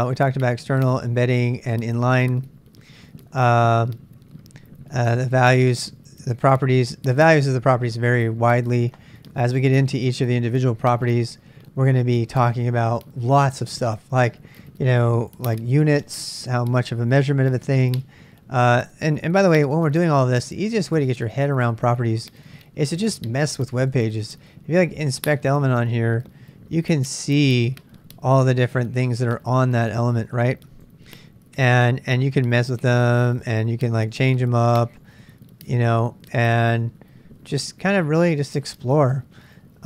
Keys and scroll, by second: 19.5 super+Tab, 20.4 super+Tab.